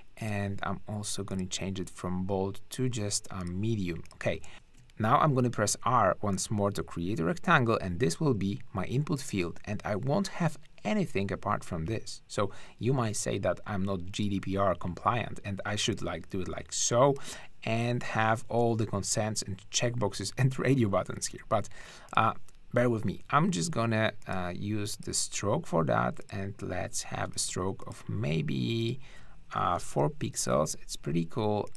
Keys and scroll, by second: 4.5 shift+`, 5.4 shift+r, 21.3 super+z, 29.7 BackSpace, 29.8 4, 29.9 Return.